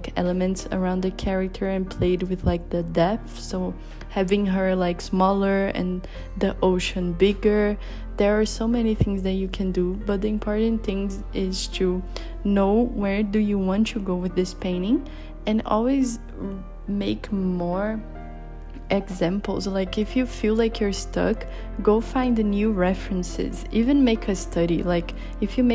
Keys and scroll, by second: 3.3 b, 5.5 b, 9.0 b, 10.7-11.6 typing, 13.7-15.2 typing, 20.5-23.0 typing.